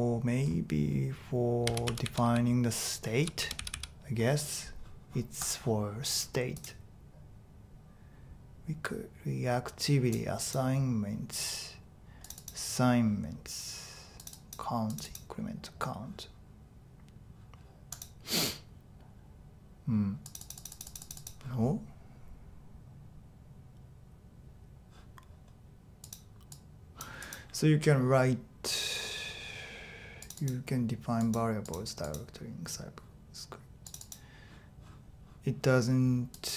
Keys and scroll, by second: 1.4-3.7 typing.